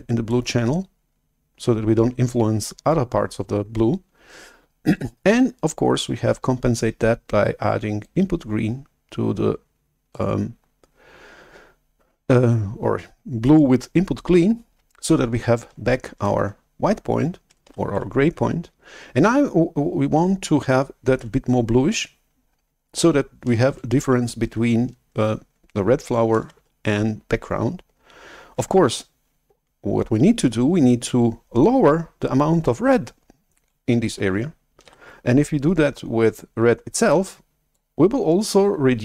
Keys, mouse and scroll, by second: 8.0-12.6 drag, 17.8 shift+super+F11, 26.5 shift+super+F11, 34.9 shift+super+F11, 37.0-39.0 drag.